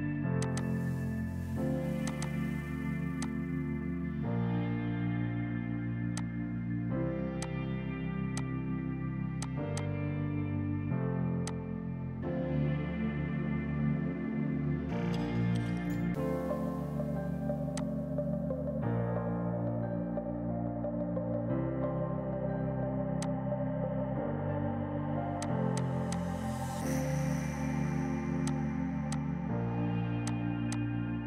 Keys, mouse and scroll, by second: 0.4 click, 5.6 click, 10.8 Escape, 11.4 click, 20.8 space, 23.2 click, 24.5 right click, 25.4 click, 27.3 shift+Page_Down, 28.5 click, 29.1 click.